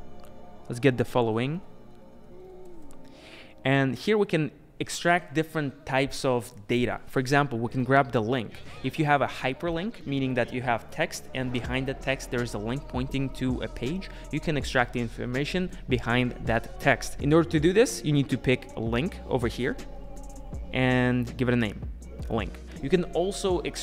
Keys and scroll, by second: 2.9 Return.